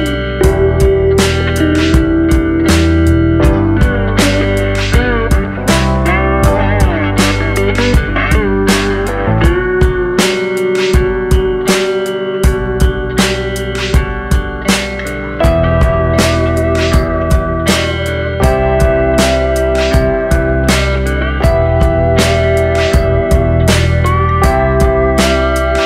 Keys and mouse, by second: 2.9-3.4 drag, 3.7 shift+middle click, 4.5 shift+middle click, 8.7 ctrl+r, 12.7 click, 13.4 shift+middle click, 17.1 shift+middle click, 18.5 click, 19.0 middle click, 19.4 shift+middle click, 20.9 click, 21.3-23.8 drag, 24.0 shift+middle click, 24.3-25.4 middle drag, 25.6-25.8 middle drag.